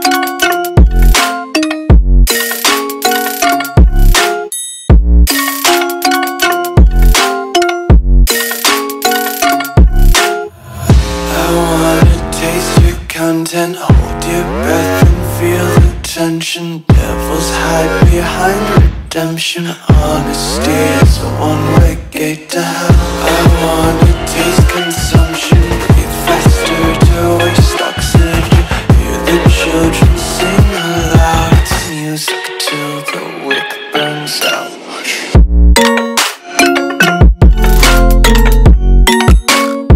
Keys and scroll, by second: 1.3 a, 5.3 space, 5.8 super+space, 5.9 super+space, 6.4-8.1 super+space, 24.5 space, 25.0 space, 39.3 space, 39.8 alt+super+space, 39.9 alt+super+space.